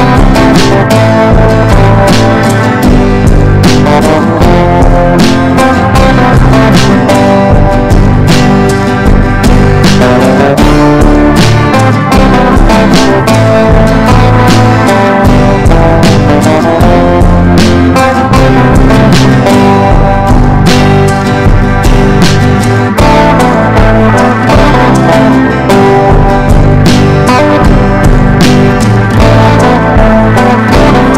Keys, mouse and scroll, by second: 12.3-14.9 typing, 15.5 click, 16.3 ctrl+e, 16.9 ctrl+b, 18.0 click, 18.9 Return, 19.4-31.1 typing, 26.0 Return.